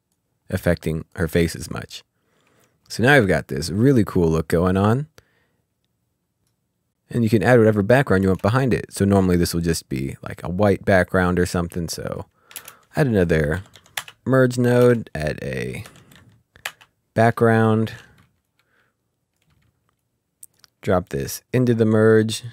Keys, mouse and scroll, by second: 1.6 click, 2.9 space, 8.2 space, 8.8 click, 12.6 ctrl+space, 13.3-13.8 typing, 14.0 Return, 14.8 ctrl+space, 15.9 typing, 16.7 Return, 18.5 Return, 19.2 click, 19.4 Delete, 20.0 click.